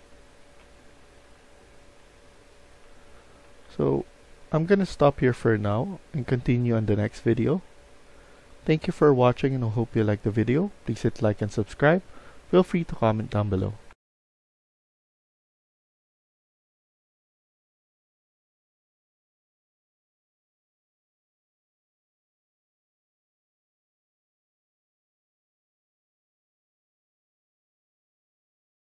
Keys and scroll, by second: 0.0-3.9 typing, 6.5-7.6 typing.